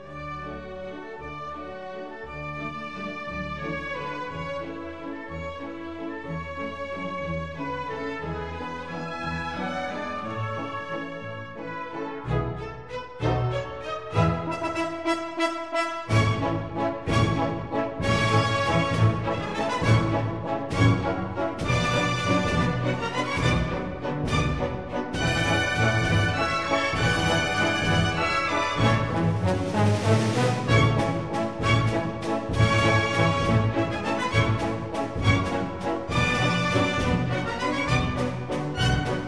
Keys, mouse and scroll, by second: 0.1-1.9 drag, 14.4 shift+a, 18.0 s, 20.9 click, 28.8 s, 35.1-36.4 middle drag, 36.4-38.2 drag, 38.6-39.2 drag.